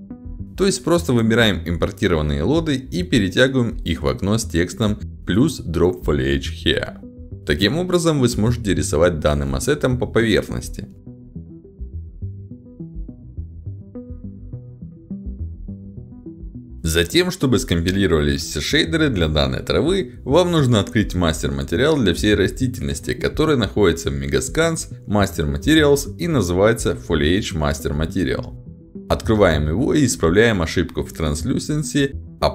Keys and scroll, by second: 7.9 a, 10.2 w, 10.4 a, 12.9 a, 12.9 w, 13.4 e, 15.2 d, 15.9 w.